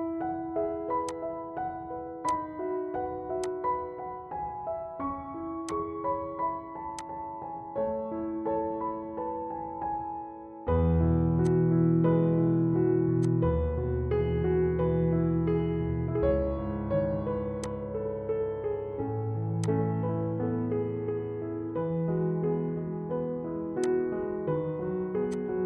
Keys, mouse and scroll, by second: 1.2-9.2 drag, 9.2 scroll down 1, 10.4-11.3 scroll up 1, 11.4-13.2 drag, 13.2-14.4 drag, 14.4 Right, 17.7 click, 24.1 click.